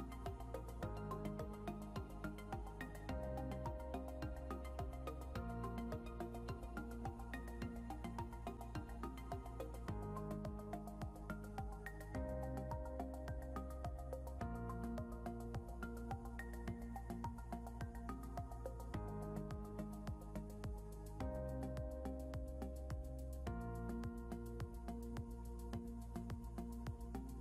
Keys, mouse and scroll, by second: 0.6 ctrl+z, 2.7 ctrl+z, 9.7 scroll, 9.7 scroll down 1, 21.9 scroll down 1, 22.9 scroll up 1, 23.3 scroll down 1, 24.8 scroll up 1, 27.1 right click.